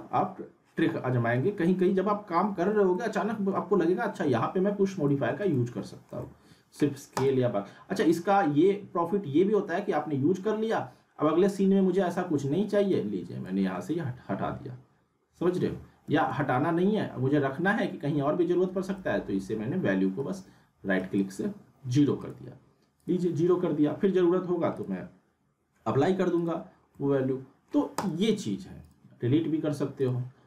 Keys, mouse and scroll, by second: 2.5 alt+Num_Lock, 2.9 middle click, 2.9-3.6 alt+middle drag, 5.1 z, 5.5-6.1 alt+middle drag, 7.1 click, 12.9-13.5 drag, 16.1 ctrl+z, 18.8 right click, 22.2 click, 26.9-27.9 alt+middle click, 27.9-30.4 drag.